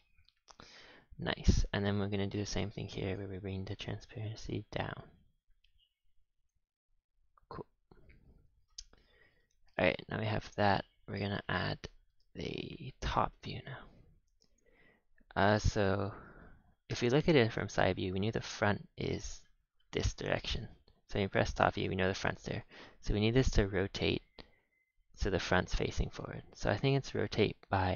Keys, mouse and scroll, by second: 0.8 a, 1.5 click, 3.0 click, 3.7-7.6 drag, 8.9 a, 9.1 a, 9.1-9.5 scroll down 5, 9.5 ctrl+s, 9.8-10.6 middle drag, 10.6-11.4 scroll up 4, 11.4 KP_7, 12.1 shift+a, 14.6 shift+a, 15.8-16.8 middle drag, 16.8 KP_3, 17.6-20.6 scroll up 5, 20.6 KP_7, 21.7-22.0 scroll down 4, 22.5 click, 22.8 r, 26.0 r.